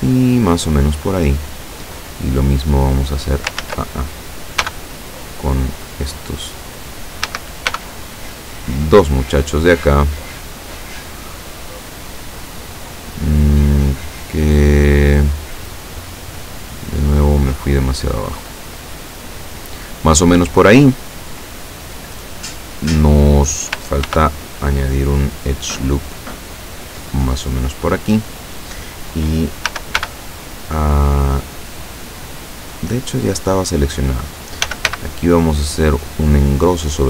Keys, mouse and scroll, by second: 2.0 right click, 2.8 click, 3.6 ctrl+z, 4.7 b, 5.3-6.3 drag, 7.3 a, 7.8 b, 8.3 click, 9.6-11.3 drag, 12.0-14.2 drag, 14.8-16.8 drag, 17.2 click, 18.5 click, 24.1 ctrl+r, 25.2 click, 27.4 click, 29.7 a, 30.0 b, 32.8-34.0 drag, 34.7 s, 34.9 x.